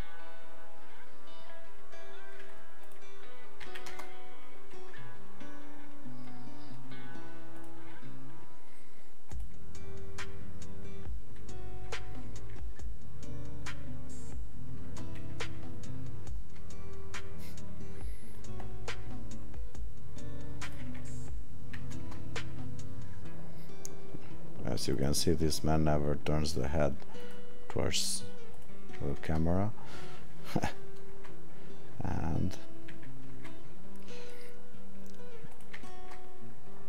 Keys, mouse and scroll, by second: 20.7 click, 28.7 click, 33.4 click, 35.5 click.